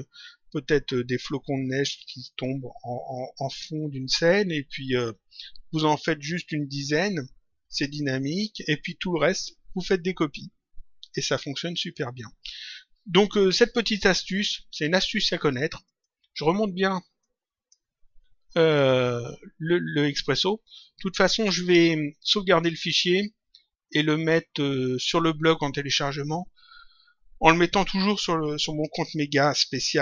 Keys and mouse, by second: 15.7 click, 17.2 click.